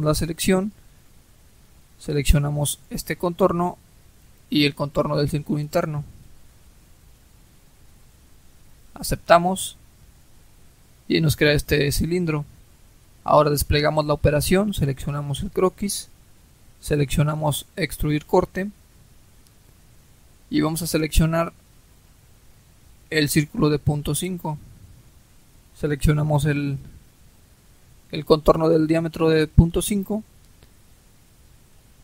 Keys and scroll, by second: 25.2 Delete.